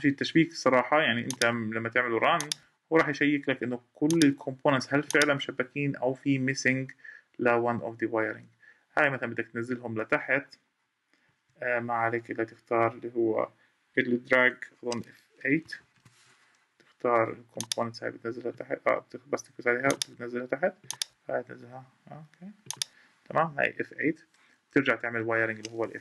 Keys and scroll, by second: 11.0 Escape, 15.6 F8.